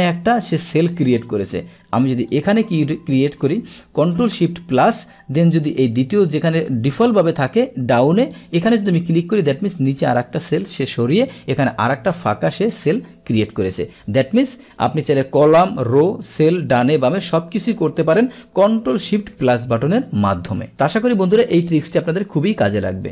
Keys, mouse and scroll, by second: 2.3 click, 3.0 click, 8.4 click, 20.7 click.